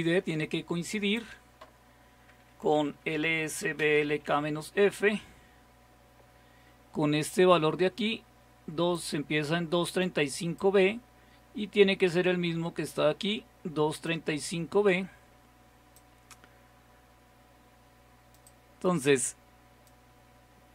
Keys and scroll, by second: 2.5-4.8 typing.